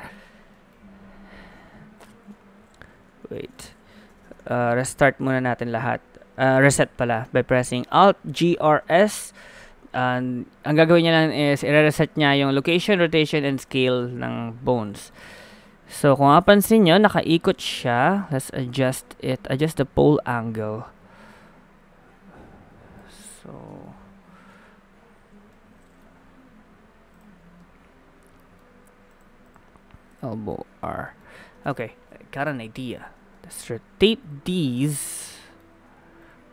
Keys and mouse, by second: 0.1 middle click, 0.7-1.8 middle drag, 2.3 KP_1, 3.2 KP_7, 4.1 a, 4.3 a, 8.3 alt+g, 8.5 alt+r, 8.8 alt+s, 14.0 a, 15.7 middle click, 16.4 middle click, 17.5 middle click, 17.9 middle click, 19.1-23.4 drag, 19.1 middle click, 23.4 middle click, 23.7 KP_1, 23.8 KP_3, 24.5 KP_1, 25.1 KP_3, 27.6 middle click, 30.5 middle click, 31.6 Tab, 32.4 KP_7.